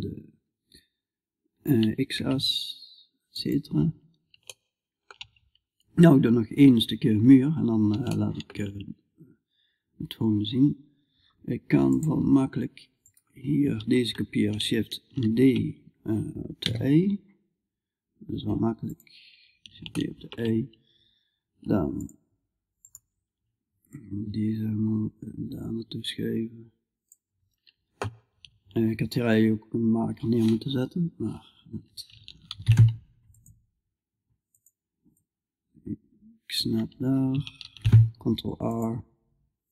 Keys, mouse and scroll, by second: 3.4-5.6 middle drag, 5.6-7.5 drag, 7.5-11.0 middle drag, 11.4-12.7 drag, 12.5 right click, 14.6 shift+d, 21.4-26.6 drag, 23.4-26.6 right drag, 30.4-34.0 middle drag, 32.0 ctrl+r, 34.6-37.1 drag, 37.1 ctrl+r.